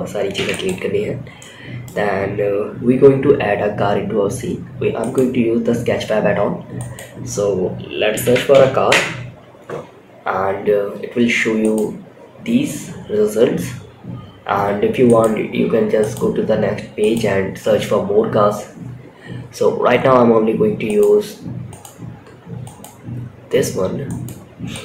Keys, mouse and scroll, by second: 0.7-1.1 middle drag, 4.3 click, 6.1-8.2 drag, 10.9-14.5 drag, 15.3-16.0 drag, 16.3-20.3 drag, 21.0-23.8 drag, 24.0 click, 24.5-24.8 drag.